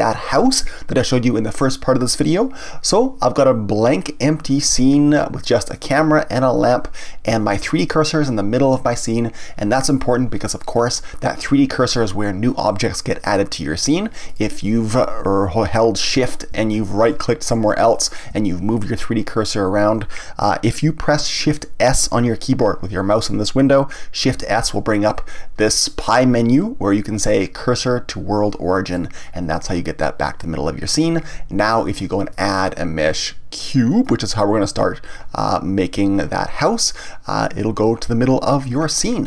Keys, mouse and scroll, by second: 5.7 click, 6.5 click, 14.3 click, 17.0 shift+right click, 17.9 shift+right click, 24.3 shift+s, 32.3-35.3 drag, 38.5-39.2 scroll up 1.